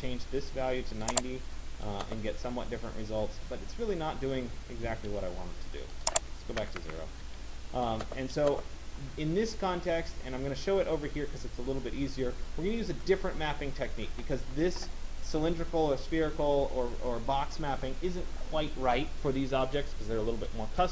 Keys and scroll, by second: 6.3 0, 6.9 Return.